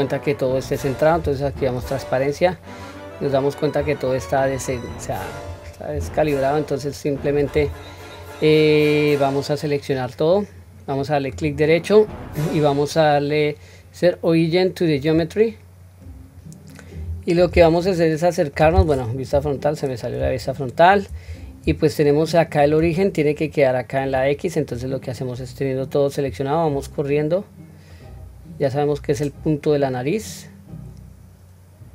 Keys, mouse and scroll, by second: 1.4 q, 2.4 scroll up 1, 3.2 scroll down 1, 4.7-5.4 drag, 4.7-5.4 scroll down 3, 5.9-6.2 scroll up 1, 6.8 scroll up 3, 6.9 scroll down 1, 7.8-9.1 scroll down 1, 11.3-15.2 right drag, 16.9-17.8 scroll up 1, 17.8-18.6 shift+middle drag, 17.8 scroll up 2, 19.3 KP_1, 20.4-20.9 shift+middle drag, 21.3-22.1 scroll up 3, 22.1-22.6 shift+middle drag, 26.2 click, 26.4-31.9 drag.